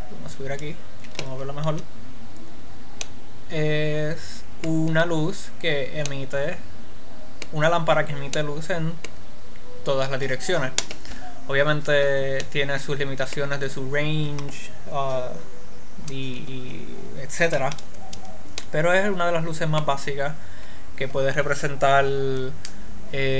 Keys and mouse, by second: 0.0 click, 1.8 middle click, 2.0 KP_Decimal, 3.6-5.4 middle drag, 5.9-11.9 middle drag, 12.7-23.3 middle drag.